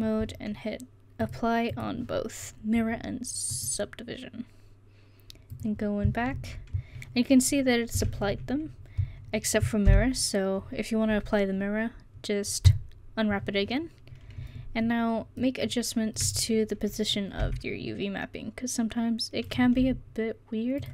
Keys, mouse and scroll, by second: 6.4 Tab, 13.0 u, 17.6 g, 20.7 s.